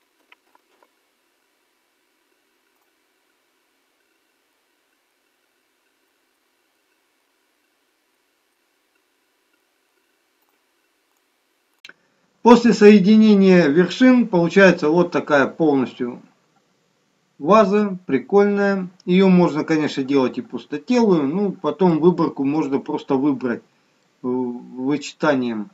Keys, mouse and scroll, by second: 0.2 ctrl+z, 0.5 ctrl+z, 0.7 ctrl+z, 2.7 click, 4.0-4.3 scroll down 7, 4.5 middle click, 5.3-5.6 scroll down 3, 6.0 alt+middle click, 6.7 shift+middle click, 7.3-8.0 scroll up 5, 8.1 shift+middle click, 9.3 scroll up 1, 9.5 scroll down 1, 9.6 middle click, 10.4 click, 15.9 middle click, 21.8 middle click, 24.0 middle click.